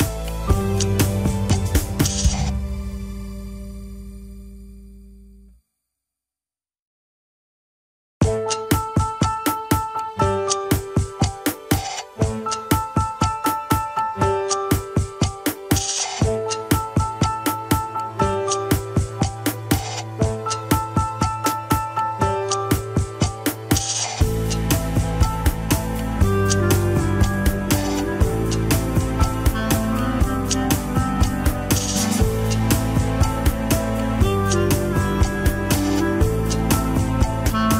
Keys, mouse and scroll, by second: 0.3 KP_1, 1.0 ctrl+Tab, 2.0 click, 3.4 click, 6.6-8.8 middle drag, 8.8 scroll down 1, 8.9 KP_1, 9.6 a, 9.9 alt+r, 10.3 alt+g, 10.3-11.5 shift+middle drag, 11.5 scroll down 1, 11.8-12.3 shift+middle drag, 12.3 scroll down 3, 12.6 shift+middle drag, 12.8 scroll up 1, 13.4 ctrl+s, 14.1-14.9 scroll down 1, 14.9-15.4 drag, 15.8 scroll up 3, 16.4 g, 18.2-18.8 scroll up 6, 18.8-19.2 scroll down 4, 19.2 ctrl+Tab, 21.1 shift+click, 21.6 ctrl+Tab, 22.4 alt+z, 23.4 ctrl+click, 23.4 alt+z, 24.4 alt+z, 25.5 ctrl+click, 25.5 alt+z, 26.8 alt+z, 28.0 ctrl+click, 28.6 alt+z, 29.3 scroll down 3, 29.8 ctrl+Tab, 30.4 click, 32.0 ctrl+Tab, 32.7 click, 33.6-34.2 drag, 34.5 g, 37.4 scroll up 7.